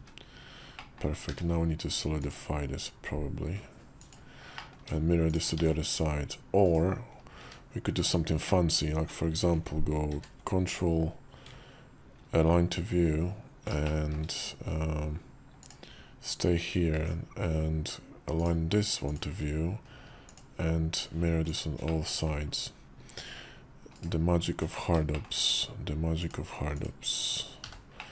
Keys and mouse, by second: 0.7 click, 1.1 q, 4.4 middle click, 5.2 shift+click, 5.4 alt+x, 7.3 `, 7.9 `, 10.0 ctrl+q, 13.7-15.6 shift+middle drag, 16.8 alt+x, 18.2-19.3 drag, 20.2 shift+click, 21.3 click, 21.7 middle click, 24.3 KP_5, 25.0 shift+middle click, 26.1 click, 26.7 click, 27.5 h, 27.9 middle click.